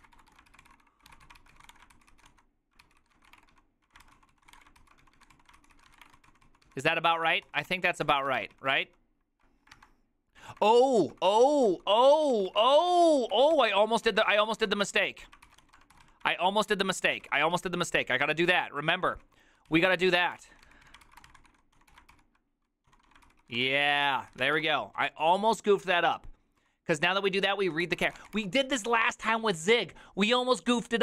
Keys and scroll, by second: 0.0-9.4 typing, 2.9 ctrl+c, 9.9 alt++, 10.6 alt+{, 10.6-28.8 typing.